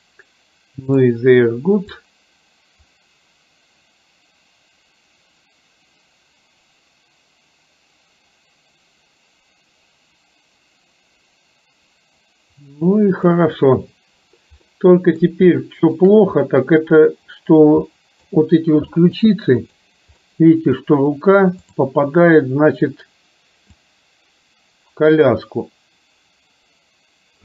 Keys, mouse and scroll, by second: 2.0-13.5 drag, 14.7 middle click, 15.6 shift+middle click, 18.0 middle click, 19.1 middle click, 19.9 click, 20.2 middle click, 21.7 click, 24.0-27.4 drag.